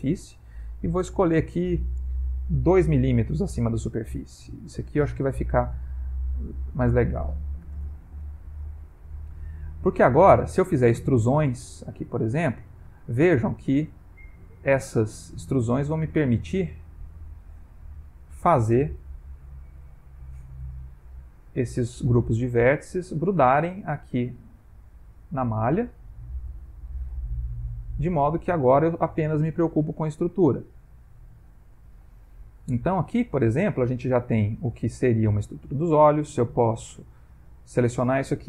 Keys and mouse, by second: 0.9 click, 2.9 m, 5.6 ctrl+click, 9.0 ctrl+middle click, 10.7 e, 12.3 e, 13.4 e, 14.5 e, 15.5 e, 16.6 e, 18.2 shift+click, 19.0 f, 19.4 middle click, 20.9 click, 21.0 g, 22.1 click, 22.3 g, 22.6 click, 23.2 click, 23.5 g, 24.8 click, 24.9 g, 25.7 middle click, 28.2 ctrl+middle click, 30.5 click, 31.2 middle click, 32.1 ctrl+middle click, 32.8 middle click, 33.9 middle click, 34.2 ctrl+middle click, 34.9 middle click, 37.5 click.